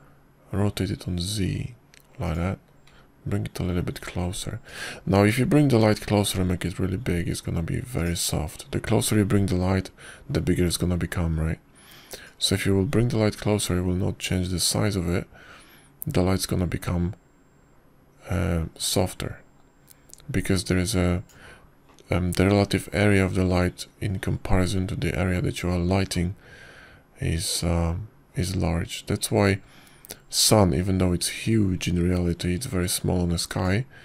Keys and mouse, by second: 1.3 r, 4.8 g, 7.7 s, 14.1-23.2 drag, 29.4-34.0 drag.